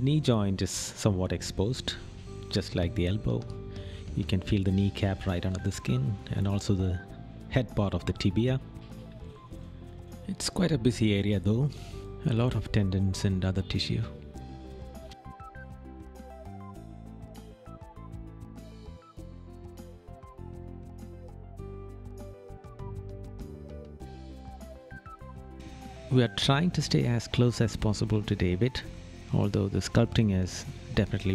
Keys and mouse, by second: 4.3 right click, 6.1 right click, 12.0 right click, 16.9 right click, 24.0 right click, 26.0 right click, 27.2 right click, 30.5 right click.